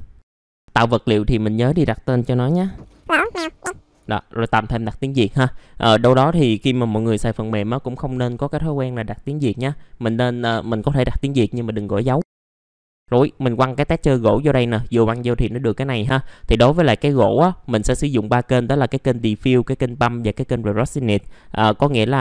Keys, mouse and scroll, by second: 2.4-3.5 typing, 8.6 click, 12.2 middle click, 12.3 scroll up 1, 12.4 click, 15.5 middle click, 16.0 scroll up 1, 16.1 scroll down 1, 16.7 click, 17.3 middle click.